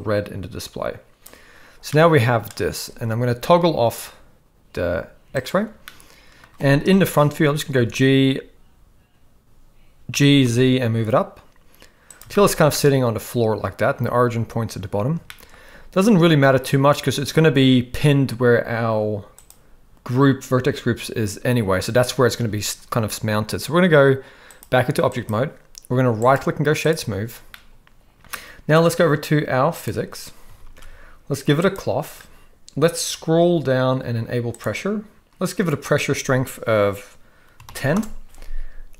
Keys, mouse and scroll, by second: 2.1 middle click, 5.5 click, 5.8-6.4 middle drag, 6.9 KP_1, 7.7 a, 10.1 g, 12.3 shift+middle drag, 12.8-13.8 middle drag, 15.2 shift+middle click, 24.5-25.9 drag, 26.2-26.9 right drag, 27.5-28.2 middle drag, 29.7 click, 30.5 ctrl+s, 30.7 ctrl+s, 31.7 click, 34.5-38.0 drag.